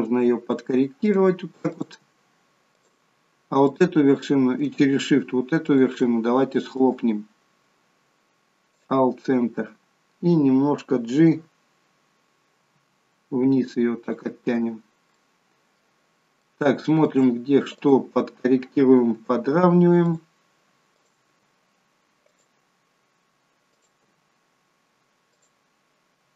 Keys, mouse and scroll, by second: 1.7 click, 2.0 g, 3.7 click, 5.7 shift+click, 6.7 right click, 12.7 g, 15.1 shift+middle click, 17.8 click, 19.1 g, 21.0 click, 21.3 g, 23.7 click, 24.0 g.